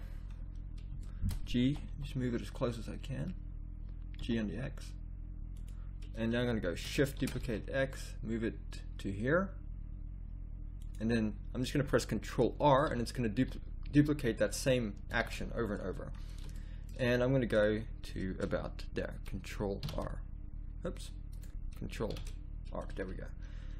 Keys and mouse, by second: 0.3 middle click, 1.7 g, 6.6 middle click, 7.2 shift+d, 11.3-12.9 middle drag, 12.9-15.1 typing, 19.8 ctrl+r, 22.1 shift+r.